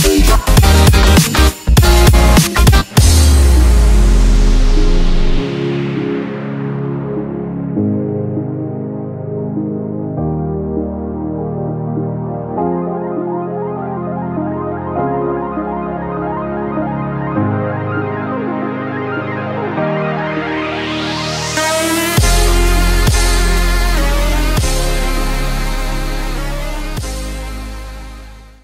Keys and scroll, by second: 0.4 Delete, 1.2 space, 1.7 alt+super+space, 1.8 alt+super+space, 2.0 alt+super+space, 2.1 alt+super+space, 2.3 alt+super+space, 2.5 alt+super+space, 2.5 alt+super+space, 2.7 alt+super+space, 3.2-4.3 typing, 3.3 super+space, 3.4 super+space, 3.5 super+space, 6.2 super+c, 7.1 alt+super+space, 7.2 alt+super+space, 7.3 alt+super+space, 7.3-8.0 typing, 7.4 alt+super+space, 7.5 alt+super+space, 8.0 super+space, 8.1 super+space, 8.3 super+space, 8.3 super+space, 8.4 super+space, 9.3 alt+super+2, 10.1 alt+super+space, 10.7 space, 11.9 super+v, 15.5 super+g, 17.4 shift+super+F5, 19.2-19.8 typing, 19.9 super+space, 19.9 super+space, 20.2 super+space, 20.3 super+space, 20.6 super+space, 20.7 super+space, 20.9 super+space, 20.9 super+space, 21.4 super+space, 22.9-24.9 typing, 23.1 super+space, 25.5 Escape, 27.0 ⟲, 27.1 Escape.